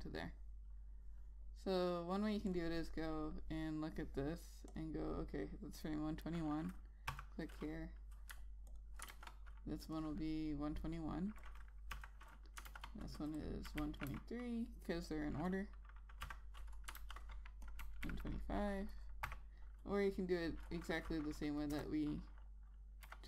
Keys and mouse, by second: 7.8 F6, 9.4 alt+click, 9.8 ctrl+a, 10.6 click, 12.6 F6, 13.4 ctrl+a, 14.1 click, 14.4 1, 15.7 click, 17.6 F6, 18.4 click, 18.5 1, 19.9 6, 22.4 BackSpace.